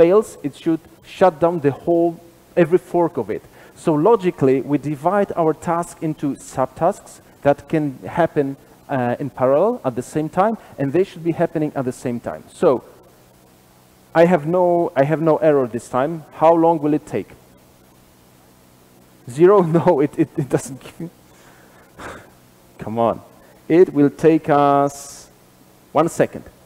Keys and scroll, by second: 15.4 super+b, 16.5 super+[, 16.5 ctrl+alt+Left, 21.6 ctrl+r, 21.6 shift+F10.